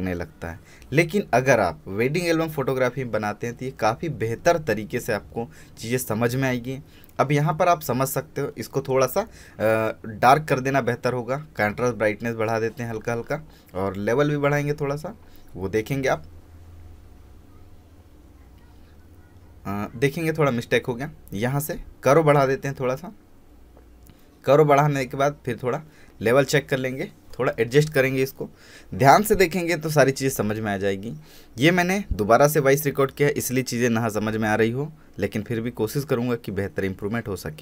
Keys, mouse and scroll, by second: 5.3 space, 5.6-6.1 alt+scroll down 1, 6.1-8.9 drag, 9.7 click, 13.5 alt+i, 13.8 a, 16.6 c, 17.1-17.5 scroll up 1, 18.0 Tab, 18.2-19.3 scroll up 1, 19.5 alt+i, 20.1 v, 21.0 click, 21.6 alt+i, 21.9 a, 23.9 m, 25.2 click, 33.9-34.3 scroll up 1, 34.3-35.0 scroll down 1, 35.0-35.9 scroll up 1, 35.9 click, 36.6-37.0 scroll up 1, 37.0-37.6 scroll down 1.